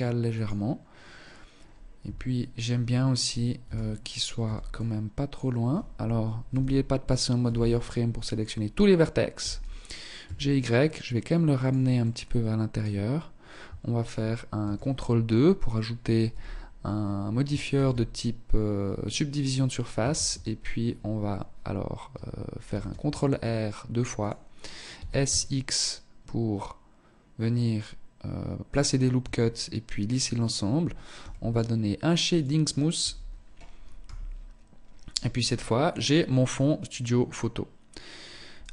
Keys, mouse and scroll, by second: 1.1 KP_3, 2.4 scroll up 1, 2.8 a, 3.6 b, 5.6 z, 6.5 b, 7.9 scroll up 2, 8.5 g, 11.1 middle click, 13.7 ctrl+2, 15.4 z, 16.9 ctrl+e, 19.3 shift+e, 21.8 ctrl+r, 24.1 s, 28.3 Tab, 30.3 t, 31.5 click, 32.1 t, 33.1 KP_0, 34.0 scroll down 2, 34.5-35.2 scroll up 3, 35.2-35.6 scroll down 2, 35.7 scroll up 1, 36.3-36.7 scroll up 2, 37.7 right click, 38.5 KP_1.